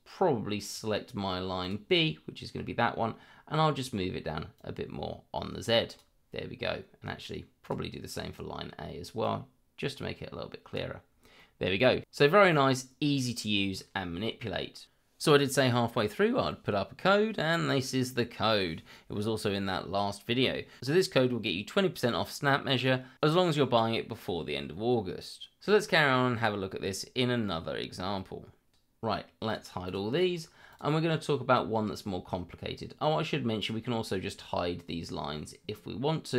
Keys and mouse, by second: 0.6 click, 1.6 click, 4.5-5.9 drag, 7.6 click, 9.2-10.7 drag, 11.3 middle click, 29.5 click, 29.8 click, 30.1 click, 30.7 click, 33.6 click.